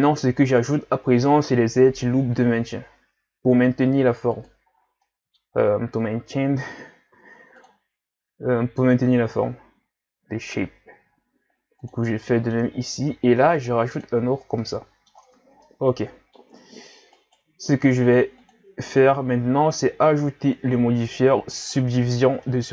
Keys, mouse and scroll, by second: 0.7 ctrl+r, 4.7-5.0 scroll down 3, 5.0 middle click, 5.5-6.8 scroll up 2, 6.8-7.1 scroll up 1, 7.1 ctrl+r, 12.3 middle click, 13.1 ctrl+r, 14.3 scroll down 1, 14.6 middle click, 15.2 Tab, 15.6-16.6 middle drag, 16.6-17.2 scroll up 3, 17.2 right click, 18.4-21.9 drag, 22.5-22.7 middle drag.